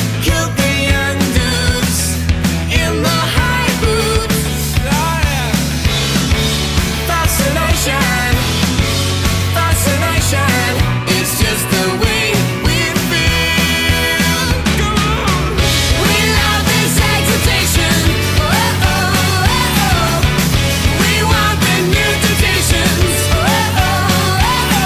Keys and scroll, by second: 21.1 alt+shift+super+e.